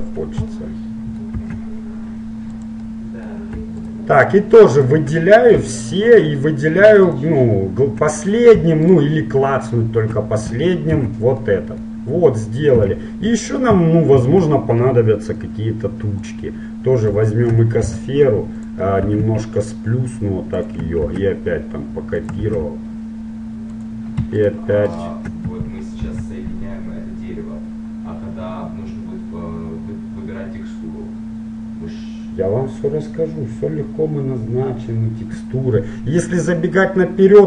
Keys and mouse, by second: 1.5 shift+d, 4.0-5.4 right drag, 5.4 middle click, 7.5-8.8 right drag, 8.8-9.8 middle drag, 11.0 ctrl+j, 12.8 KP_1, 14.5 shift+a, 18.0 g, 19.3 s, 21.4 shift+d, 22.6 shift+d, 24.6-26.9 right drag, 26.2 ctrl+j, 36.6-37.4 middle drag.